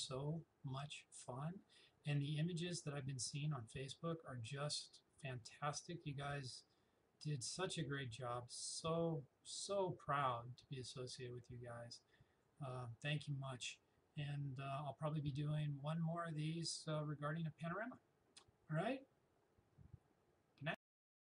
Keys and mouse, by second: 4.8-9.3 drag, 10.8-15.0 drag, 21.3 click.